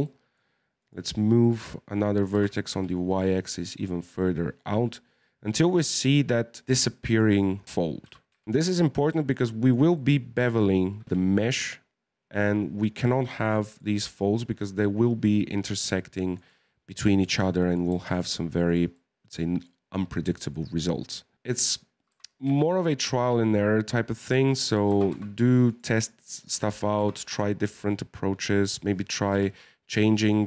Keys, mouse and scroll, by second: 0.8 right click, 1.4 right click, 2.3 g, 3.8-7.0 middle drag, 7.0 right click, 8.0 g, 9.9 middle click, 10.5 right click, 11.0 g, 13.9-16.5 middle drag, 16.5-17.1 scroll down 2, 17.1 shift+middle click, 17.3-17.6 scroll up 1, 17.6-18.6 middle drag, 18.6 right click, 18.9-20.7 middle drag, 20.7-21.3 scroll up 1, 21.3 middle click, 22.1 g, 24.9 g, 26.3 right click, 27.0 g, 29.3 KP_1, 30.3 scroll down 1.